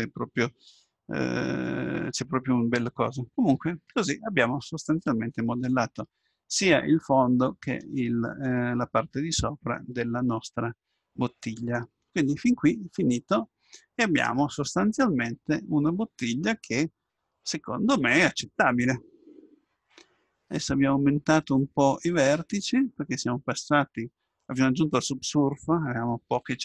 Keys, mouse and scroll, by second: 3.6-7.6 middle drag, 7.6-8.2 scroll up 1, 8.2-10.0 scroll down 1, 10.0-12.2 middle drag, 12.2 Tab, 13.0-15.1 middle drag.